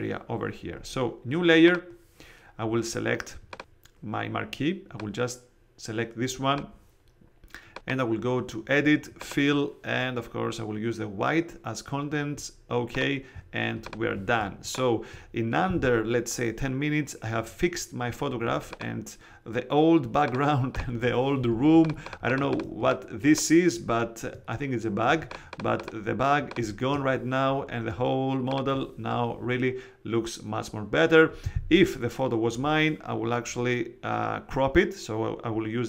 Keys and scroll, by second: 14.3 space, 15.0 alt+super+space, 21.5 alt+space, 22.3 space.